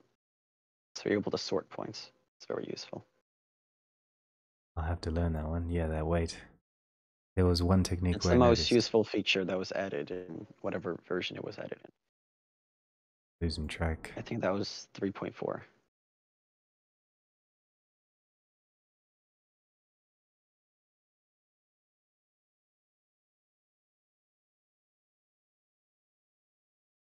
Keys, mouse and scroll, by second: 0.5 middle click, 0.8 middle click, 1.4-2.2 scroll, 2.2 click, 2.8 click, 3.7 middle click, 4.1-4.4 scroll, 5.4 middle click, 5.6 right click, 5.6 middle click, 5.9 middle click, 8.0 middle click, 8.0 right click, 11.0 click, 11.5 click, 11.9 click, 12.3 click, 12.8 middle click, 12.9 middle click, 13.7 middle click, 14.5 click, 14.9 click, 16.8 click, 17.3 click, 18.0 middle click, 18.6 click, 20.3 middle click, 21.2 middle click, 21.3 middle click, 21.4 middle click, 21.9 right click, 21.9 scroll, 22.6 scroll, 23.3-23.9 scroll, 23.9-25.0 scroll, 25.2 scroll, 26.8-27.0 scroll.